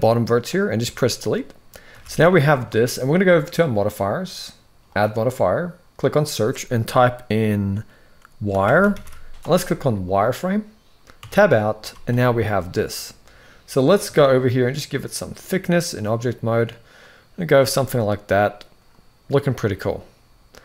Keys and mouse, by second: 0.4 x, 1.6 a, 2.0 shift+middle click, 4.6-9.9 drag, 11.0 Tab, 11.5 z, 14.1-17.3 shift+drag, 19.5-20.4 middle drag.